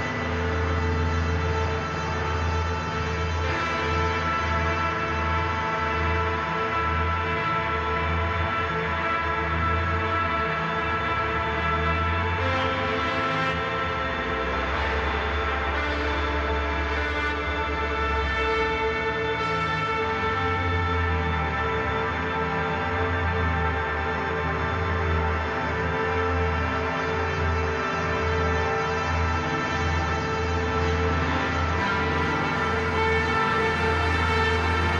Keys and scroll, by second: 18.3 ctrl+z, 18.5 ctrl+z, 18.7 ctrl+z, 20.3 ctrl+z, 20.5 ctrl+z, 21.8 ctrl+z, 29.3 ctrl+z.